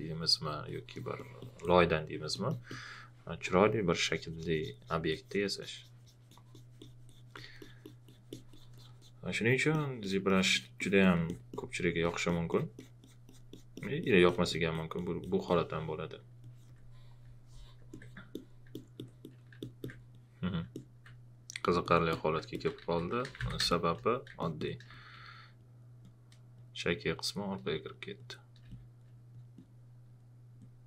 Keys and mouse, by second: 16.4 alt+click, 17.9 alt+click, 18.7 alt+click, 19.6 alt+click, 20.7 alt+click, 21.6 alt+click, 22.5-23.8 typing, 23.7 click, 24.9 space, 28.6 space, 28.7 click.